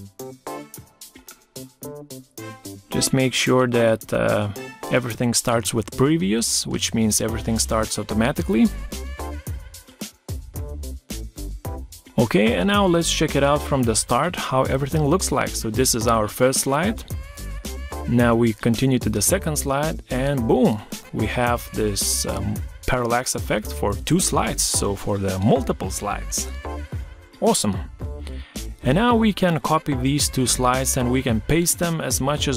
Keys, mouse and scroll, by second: 14.9 Right, 17.8 Right, 20.9 Escape, 27.3 shift+click, 28.2 ctrl+c, 29.4 ctrl+v.